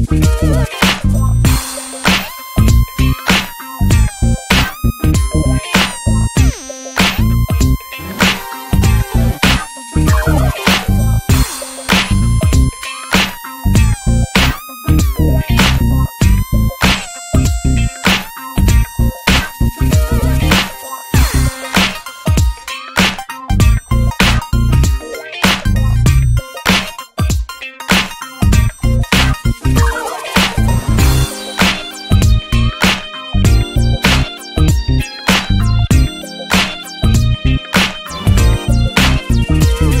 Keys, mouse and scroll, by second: 0.5 r, 2.0 g, 3.0 r, 4.1 click, 5.1 click, 5.5 click, 5.9 click, 7.0-11.5 drag, 11.5 ctrl+s, 19.7-40.0 drag.